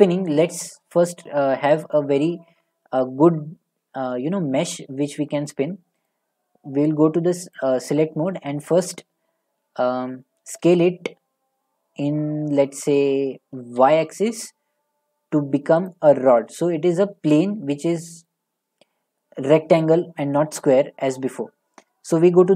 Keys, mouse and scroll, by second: 6.1 click, 7.0 click, 7.0 middle click, 7.1 middle click, 7.6 click, 10.7 s, 15.9 click, 16.3-16.7 scroll, 18.3-18.9 scroll.